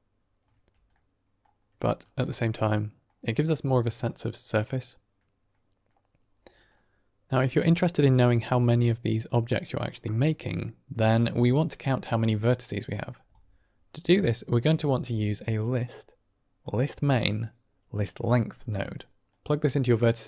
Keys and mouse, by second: 0.8-1.3 middle drag, 1.8 shift+middle click, 2.2-3.0 middle drag, 4.1 middle click, 5.6 middle click, 6.7 middle click, 7.9-9.2 drag, 10.3 middle click, 11.6-14.6 drag, 14.7 shift+a, 19.2-20.2 drag.